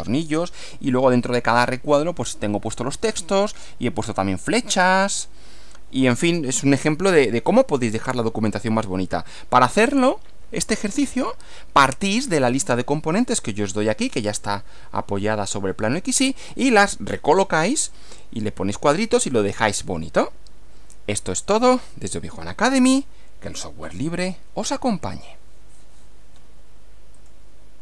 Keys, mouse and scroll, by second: 11.3 Right, 27.2 click.